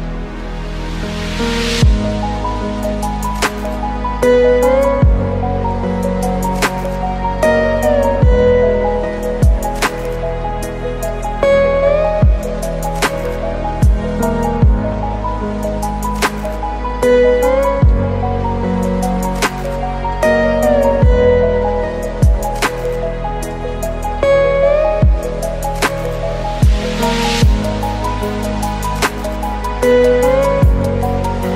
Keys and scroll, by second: 1.9 ctrl+space, 26.0 ctrl+space, 28.2 ctrl+z.